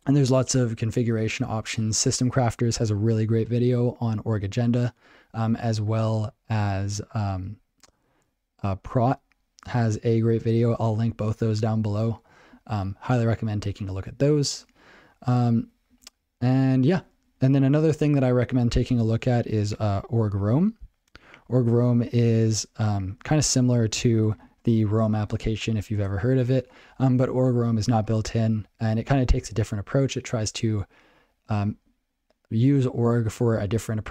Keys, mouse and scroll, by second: 14.1 ctrl+n, 14.5 ctrl+n, 15.5 ctrl+n, 15.9 ctrl+n, 16.9 ctrl+n, 17.2 ctrl+n, 22.2 click, 22.2 double click, 22.3 double click, 23.1 ctrl+alt+b, 23.3 ctrl+alt+b, 23.7 ctrl+f, 23.8 ctrl+f, 24.2 ctrl+f, 24.4 ctrl+alt+space, 24.6 ctrl+alt+space, 25.0 ctrl+g, 25.1 ctrl+alt+space, 27.6 ctrl+g.